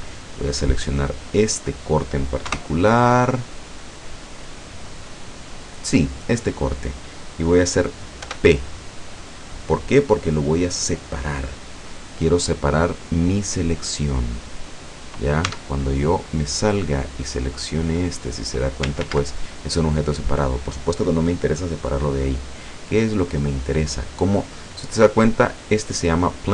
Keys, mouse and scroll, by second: 0.4 right click, 2.5 KP_0, 8.3 p, 13.6 click, 15.5 Tab, 17.0 right click, 17.9 click, 19.0 ctrl+z, 24.5 right click.